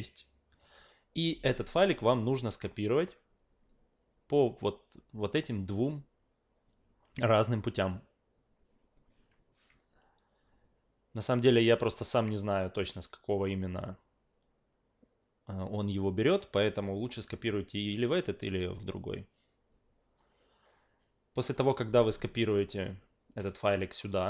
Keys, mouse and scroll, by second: 1.3-2.6 drag, 20.2-21.5 drag, 23.5 click.